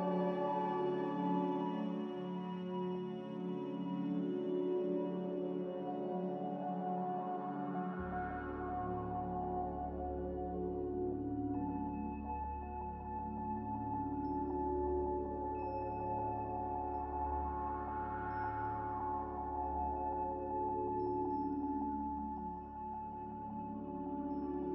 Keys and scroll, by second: 0.4 3.